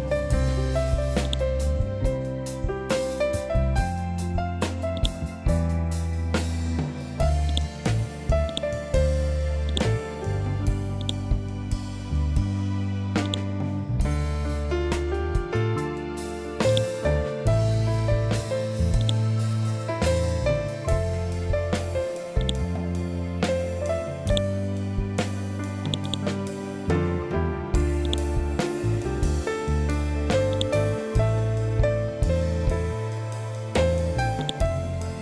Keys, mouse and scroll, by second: 4.4 click, 6.9 click, 12.7-14.3 drag, 14.3 2, 16.2 click, 18.5 click, 21.9 click, 23.7 right click, 25.3-30.0 drag, 31.1 scroll up 1, 33.9-35.2 drag.